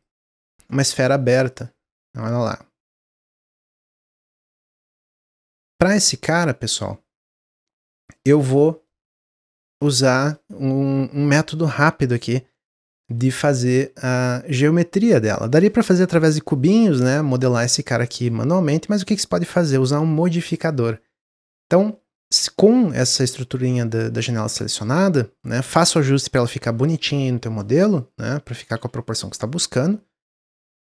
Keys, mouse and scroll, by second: 0.2-1.5 middle drag, 1.5-2.6 drag, 4.3 ctrl+z, 4.6 click, 4.9-5.4 middle drag, 5.4 Tab, 5.9-11.8 middle drag, 12.5-15.6 middle drag, 22.8-24.0 middle drag, 25.3-26.7 middle drag, 26.7 Tab, 27.5 middle click, 28.2 click, 28.7 ctrl+z, 29.2 click.